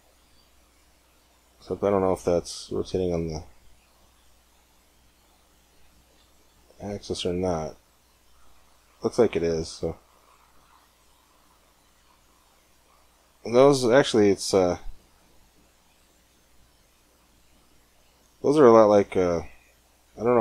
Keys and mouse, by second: 0.9 middle click, 0.9 click, 3.1 click, 4.3 ctrl+z, 4.6 ctrl+z, 5.0 ctrl+z, 5.7 ctrl+z, 7.1 click, 7.8 click, 10.8-13.6 drag, 13.9 middle click, 16.5-18.3 middle drag, 18.3 click, 18.6-20.4 middle drag.